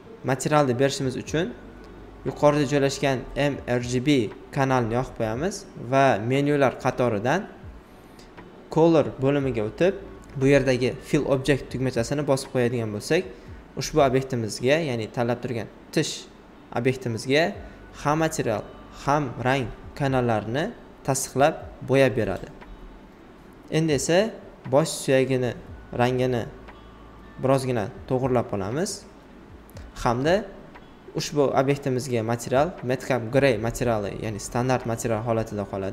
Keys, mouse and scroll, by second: 0.7 click, 1.4 alt+right click, 3.9 click, 7.9 alt+right click, 8.9 alt+click, 9.5 alt+right click, 10.4 click, 12.0 alt+right click, 13.2 alt+right click, 15.4-23.6 drag, 23.6-26.2 drag, 26.2 alt+right click, 28.6 click, 32.1 alt+right click, 33.7 click.